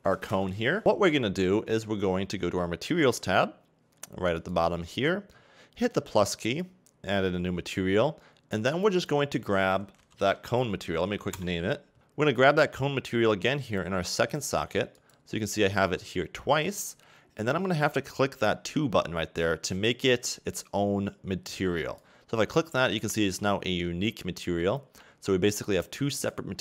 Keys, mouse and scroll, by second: 0.8-3.5 scroll up 1, 3.5 scroll up 2, 5.8 click, 6.6 click, 11.4 click, 12.0 click, 15.2 click, 22.0 click, 25.7 click, 26.2 click.